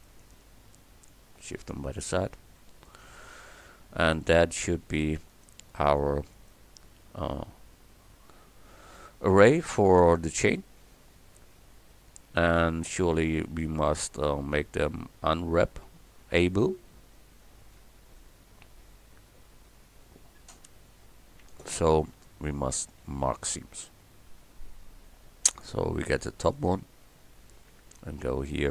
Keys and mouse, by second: 0.1-1.1 right drag, 2.1-5.4 drag, 5.4-5.9 right drag, 5.9 click, 6.1-7.3 right drag, 7.3 Tab, 11.6 a, 15.0 a, 25.5-26.6 middle drag, 26.6-28.7 right drag.